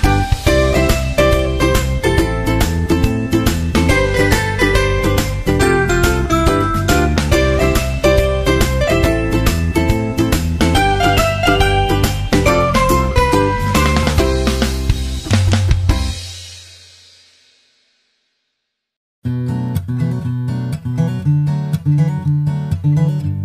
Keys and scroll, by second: 3.4 super+Right, 15.6 super+Right.